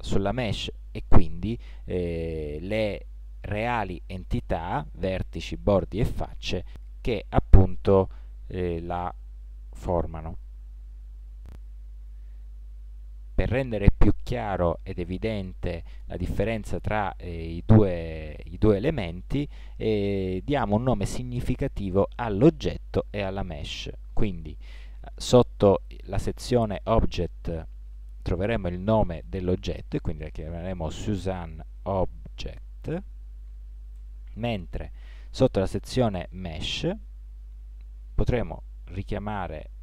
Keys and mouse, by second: 4.4 middle click, 11.5 Tab.